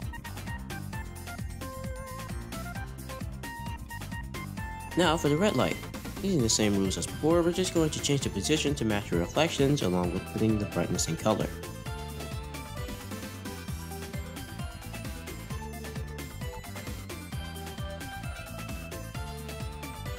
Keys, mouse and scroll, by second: 0.1 click, 0.5 click, 0.9 drag, 1.4 r, 3.6 r, 10.1-10.5 scroll up 2, 11.3-11.8 scroll down 1, 11.8 click, 12.4 click, 15.0 shift+a, 16.3 r.